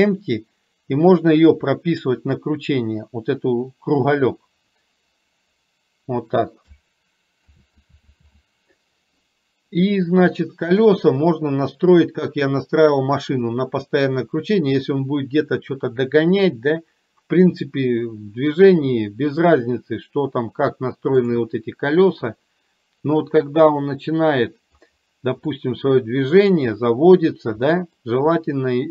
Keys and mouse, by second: 7.6 ctrl+z, 8.2 ctrl+z, 21.3 click, 23.3-24.8 middle drag, 25.7 middle click, 27.7 middle click.